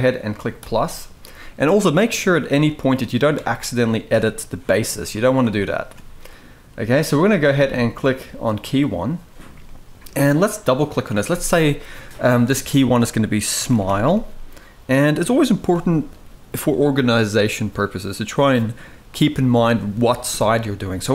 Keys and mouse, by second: 0.3 click, 3.1 Tab, 4.8 g, 5.6 Tab, 9.4-9.7 shift+middle drag, 10.6 click, 10.7-21.1 drag.